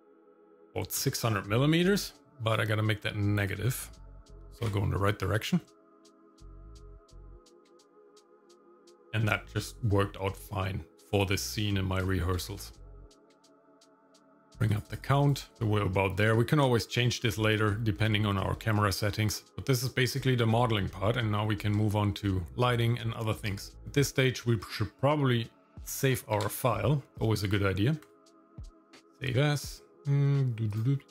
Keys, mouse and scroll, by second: 2.5-8.2 drag, 9.4-11.6 shift+middle drag, 12.0 shift+middle click, 12.4-12.8 scroll up 1, 14.2 click, 14.3 click, 14.7 click, 15.0 click, 15.2 click, 15.5 shift+middle click, 15.5 scroll down 2, 17.1 shift+middle click, 18.6 shift+middle click, 19.0-19.4 scroll up 2, 20.0-20.5 scroll down 1, 20.5 shift+middle click, 20.9 middle click, 21.4-21.7 scroll down 1, 21.8 shift+middle click, 22.6 middle click, 23.4 click, 23.7 shift+middle click, 26.3 ctrl+s.